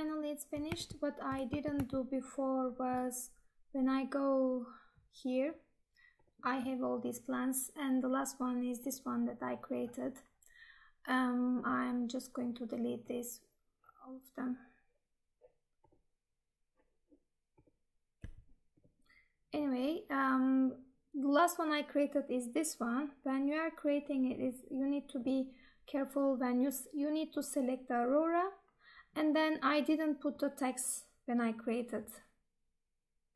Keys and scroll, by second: 0.9 Tab, 1.6 alt+Tab.